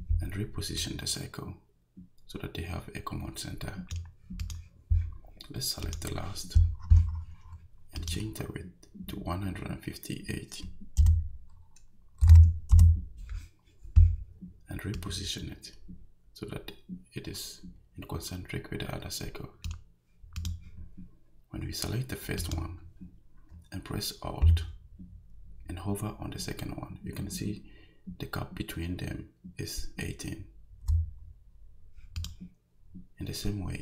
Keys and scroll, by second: 11.0 i, 12.2 5, 12.7 Return.